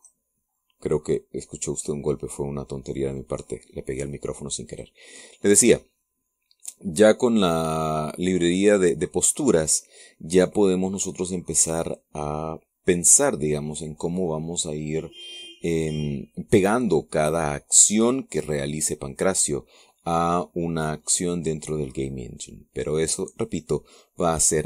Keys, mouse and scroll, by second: 0.8 click, 5.5 click, 6.6-10.4 middle drag.